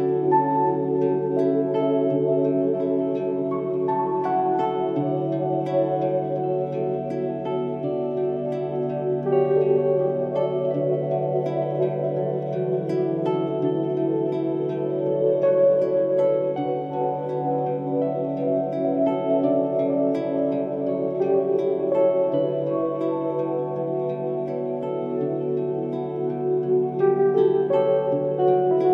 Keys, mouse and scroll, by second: 5.4 1, 5.6 7, 5.7 Return, 28.3 Escape.